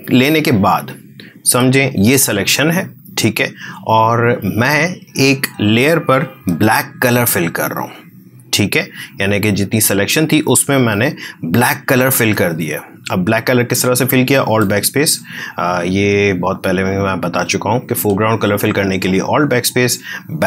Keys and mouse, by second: 0.9 ctrl+click, 7.0 alt+BackSpace, 9.5 click, 10.7 ctrl+d, 12.4 space, 12.7-15.9 ctrl+drag, 15.9-20.2 ctrl+drag.